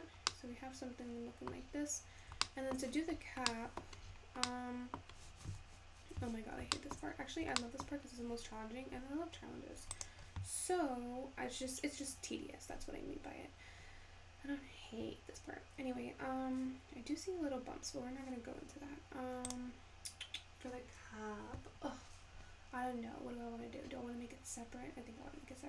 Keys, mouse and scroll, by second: 0.0-0.3 scroll down 7, 0.3-1.7 middle drag, 1.7-2.5 scroll up 6, 2.5 shift+middle click, 3.0 scroll up 1, 3.1 scroll down 1, 3.4 scroll up 2, 3.5-4.2 middle drag, 4.2-4.6 scroll up 1, 4.6-7.0 middle drag, 7.0-7.6 scroll up 4, 7.6 shift+scroll down 1, 7.8 shift+middle click, 8.3 `, 10.0 click, 16.9-17.4 scroll down 2, 17.4-17.9 scroll up 2, 17.9-19.5 scroll down 1, 19.5 click, 23.9 scroll down 2, 24.7-25.6 scroll up 1.